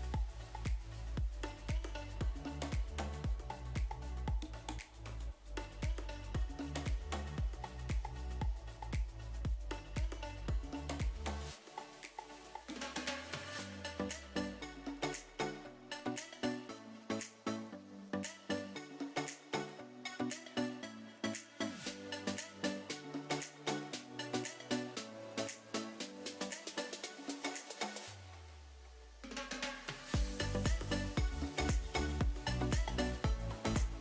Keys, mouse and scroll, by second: 0.6 ctrl+space, 3.8 n, 5.7 click, 7.6 click, 11.2 click, 12.8 4.